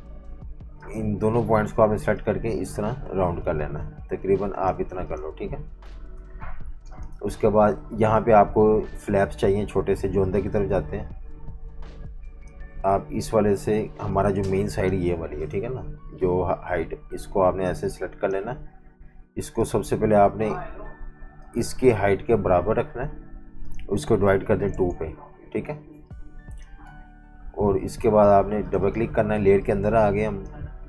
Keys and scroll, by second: 5.3 v, 5.9 super+-, 6.0 super+-, 6.7 typing, 15.9 Delete, 24.2 /, 24.5 2, 24.7 Return, 25.8-27.6 typing, 29.4 z.